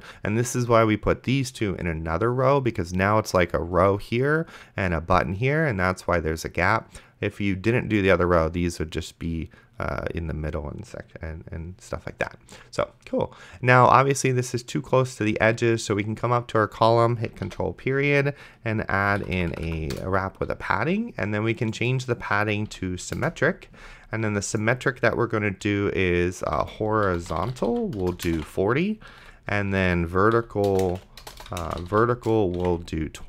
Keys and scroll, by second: 17.7 ctrl+., 19.0 Up, 19.9 Return, 22.3-23.2 typing, 26.2-28.9 typing, 29.2 Delete, 29.6 Right, 30.4-33.2 typing.